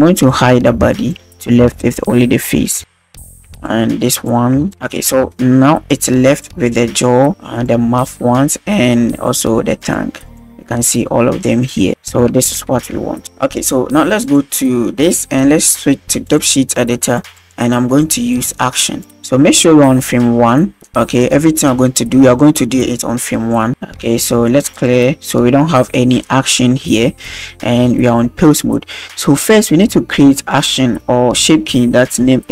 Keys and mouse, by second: 0.1 click, 0.7 b, 0.9 click, 1.1 h, 1.6 b, 2.1 click, 2.8 h, 3.3 h, 3.5 b, 3.7 drag, 4.5 b, 4.7 h, 5.4-5.7 shift+drag, 6.3 click, 6.7 g, 8.7 g, 9.9 click, 10.3 click, 10.7 g, 11.9 a, 12.3 alt+g, 12.5 alt+r, 12.8 alt+s, 13.3 ctrl+s, 16.3 drag, 17.2 click, 18.1 click, 18.3-18.9 drag, 19.2 click, 21.2 middle click, 24.7 click, 27.3-27.7 shift+drag.